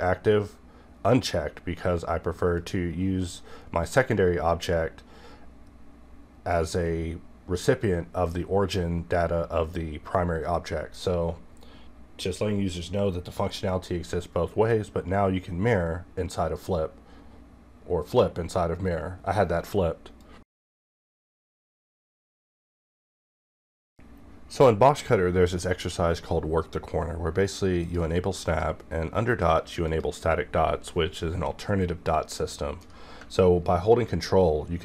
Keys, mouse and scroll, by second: 28.5 click, 32.5-34.4 middle drag, 34.4-34.8 ctrl+scroll up 1.